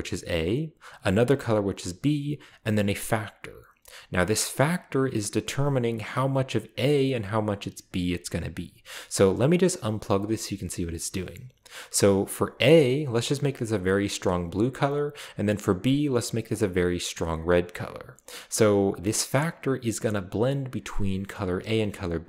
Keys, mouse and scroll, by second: 9.6 click, 12.5 click, 13.4 click, 15.6 click, 16.5 click, 17.7-18.8 scroll down 1.